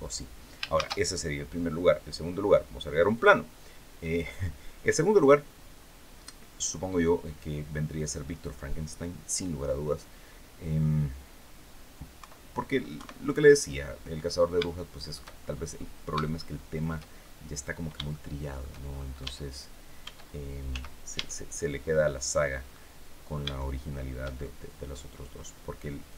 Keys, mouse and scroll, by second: 0.4 shift+a, 2.8 click, 11.8 KP_3, 12.6 KP_1, 13.7-14.2 scroll down 2, 14.4 shift+middle click, 15.1-15.6 shift+scroll up 2, 15.9 shift+middle click, 16.9 shift+scroll down 1, 17.8 shift+middle click, 18.6 shift+scroll up 1, 18.9 Tab, 19.7 Tab, 20.8 Tab, 22.4-23.8 middle drag, 24.0 shift+scroll up 1, 25.7 click.